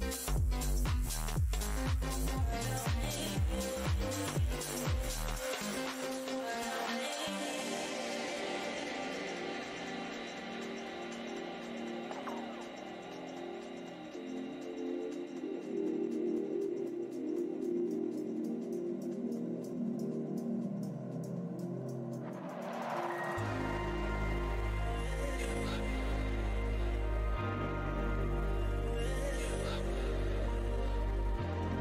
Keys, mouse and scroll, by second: 0.0 shift+v, 4.5 shift+click, 6.6 scroll down 1, 7.7 click, 8.0 w, 8.4 shift+v, 10.3 click, 11.1 space, 11.6 click, 12.4 ctrl+s, 12.8 space, 13.7-14.1 scroll down 1, 15.0 alt+scroll down 1, 17.5-18.0 scroll up 1, 18.5 shift+click, 20.3 alt+click, 20.9 space, 21.5 click, 22.1 scroll up 1, 22.4 space, 23.0 click, 24.9 w, 25.4 alt+click, 26.1 right click, 26.6 click, 26.7 scroll down 1, 27.5 scroll down 1, 27.5 space, 28.0-28.6 scroll down 1, 28.6 f, 28.8-29.6 scroll down 1, 31.0 click.